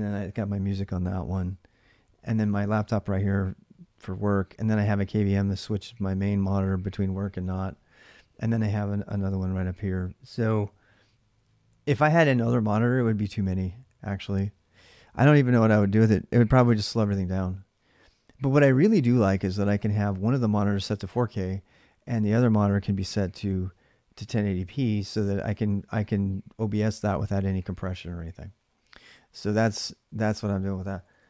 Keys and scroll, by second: 29.2-31.2 typing.